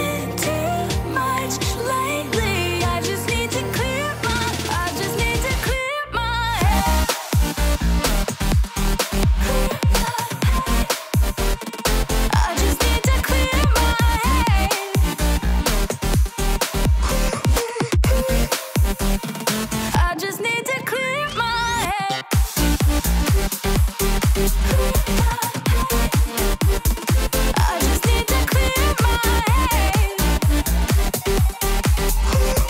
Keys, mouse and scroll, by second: 8.6 Return, 22.1 Return.